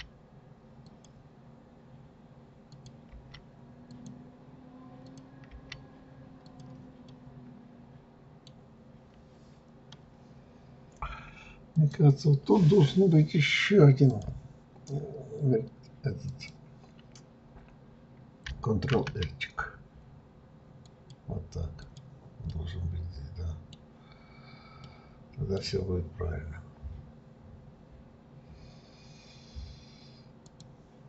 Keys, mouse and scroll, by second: 2.7 click, 3.1 g, 5.1 click, 5.5 g, 7.1-10.1 middle drag, 11.7 click, 14.1 click, 16.2 click, 18.9 ctrl+r, 22.5-26.4 middle drag, 26.4 scroll up 1, 30.5 click.